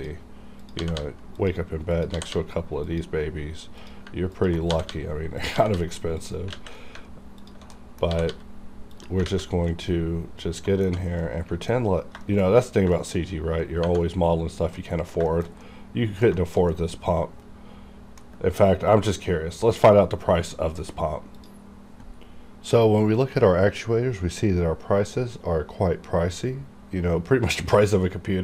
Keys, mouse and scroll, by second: 0.8 g, 1.0 g, 1.4 click, 2.1 g, 2.3 g, 2.7 click, 2.9 click, 4.3 ctrl+click, 4.7 g, 4.9 g, 5.3 click, 5.5 g, 5.7 g, 6.2 click, 6.5 alt+a, 6.8 scroll down 1, 7.4 alt+click, 7.7 middle click, 8.1 g, 8.3 g, 8.9 click, 9.3 alt+a, 9.4 scroll down 1, 9.7-11.2 middle drag, 11.5 alt+middle click, 11.8 scroll up 1, 12.2 shift+middle click, 12.4 shift+scroll up 2, 12.9 shift+middle click, 13.2 shift+scroll up 2, 14.1-14.8 scroll down 1, 14.8 middle click, 15.3 shift+middle click, 15.6 middle click, 16.2 scroll down 1, 16.3 shift+middle click, 16.7 middle click, 21.5 click.